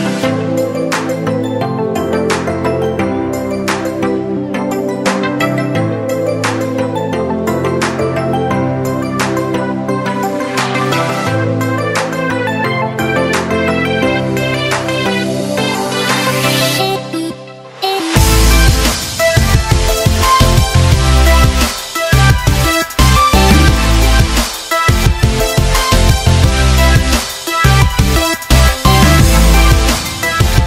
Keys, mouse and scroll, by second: 2.5-8.7 drag, 11.2-17.6 drag, 14.5-15.7 drag, 20.4 click, 21.7 Delete, 23.2 click, 23.7 Delete, 24.6 click, 25.0 Delete, 25.7-27.0 drag.